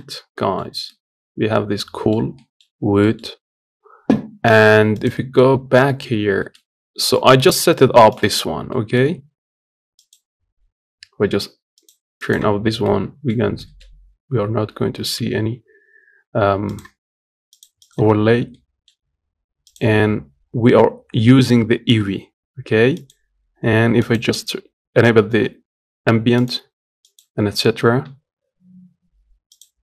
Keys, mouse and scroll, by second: 0.1 middle click, 0.3 scroll up 1, 0.6-2.4 middle drag, 2.4-2.8 scroll down 1, 2.8 middle click, 3.0-4.7 scroll up 2, 4.7 click, 5.4 scroll down 3, 5.6 middle click, 5.8-6.1 scroll up 4, 6.1 shift+middle click, 6.5 scroll down 2, 6.7 middle click, 7.3 click, 7.5-8.0 scroll up 1, 8.0 click, 8.5-9.7 middle drag, 9.7 click, 11.5 click, 12.0 click, 12.4 scroll down 3, 12.6 middle click, 13.1-13.4 scroll up 1, 13.4-15.1 shift+middle drag, 15.1 z, 17.3-18.3 drag, 18.3-23.7 middle drag, 23.7 click, 26.1 click, 26.8 click, 27.9 z, 29.3 click, 29.7-29.8 scroll down 1.